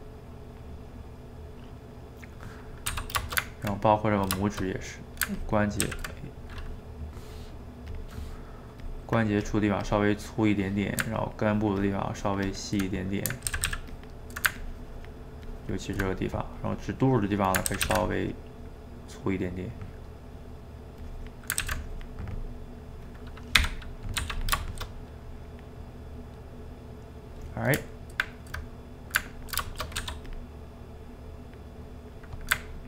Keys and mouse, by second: 0.8-3.0 middle drag, 3.0 d, 3.3-5.4 ctrl+shift+middle drag, 5.4 ctrl+click, 5.8 ctrl+z, 7.9-10.2 drag, 10.2-11.2 middle drag, 11.2-12.9 ctrl+drag, 12.9 middle click, 13.5 ctrl+z, 13.7 ctrl+z, 13.9-16.1 ctrl+drag, 16.1 middle click, 16.6-17.7 drag, 17.7 ctrl+z, 17.9 ctrl+z, 18.1 click, 18.7-21.0 middle drag, 21.0 click, 21.6 ctrl+z, 21.8 click, 22.4-23.6 middle drag, 23.6 g, 23.8 middle click, 24.2 f, 24.6 shift+middle click, 25.3 click, 25.8 middle click, 26.6 click, 27.5-30.0 middle drag, 30.0 f, 30.4 middle click, 31.1-32.7 drag, 32.7-32.8 ctrl+middle drag.